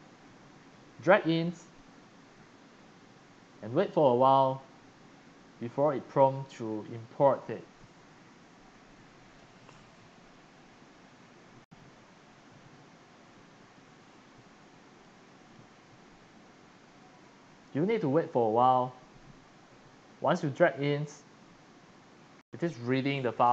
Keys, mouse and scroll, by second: 6.5 click, 7.0 click, 15.1 click, 20.4 click.